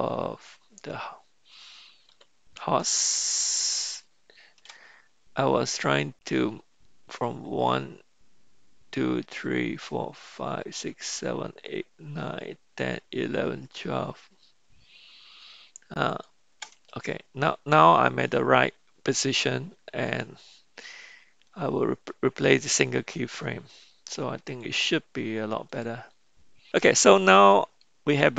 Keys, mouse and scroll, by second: 2.1 g, 20.2-24.2 right drag, 27.5-28.3 drag, 27.5-28.3 right drag.